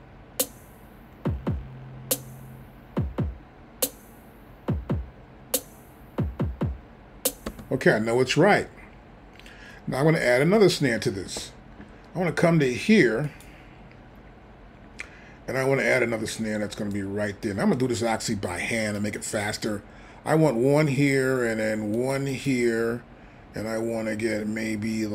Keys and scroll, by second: 7.5 space.